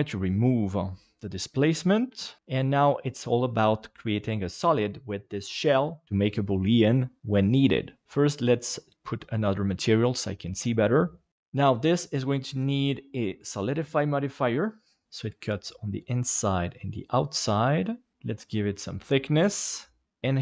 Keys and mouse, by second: 2.1 KP_Divide, 8.6 click, 12.0-13.8 drag, 15.4-16.5 middle drag, 18.0 click.